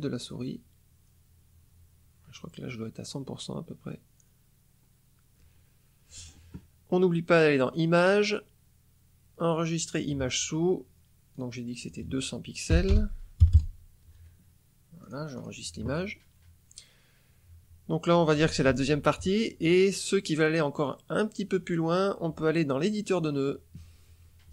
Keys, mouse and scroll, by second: 0.0 scroll down 2, 1.0 scroll down 2, 2.2 scroll up 2, 3.0 scroll down 2, 3.6 scroll up 2, 4.2 scroll down 2, 4.8 scroll up 2, 7.6 click, 9.7 click, 11.3 click, 11.7 click, 12.7 Delete, 12.9 BackSpace, 13.3 KP_0, 15.0 click, 15.3 click, 20.7 click, 23.1 click.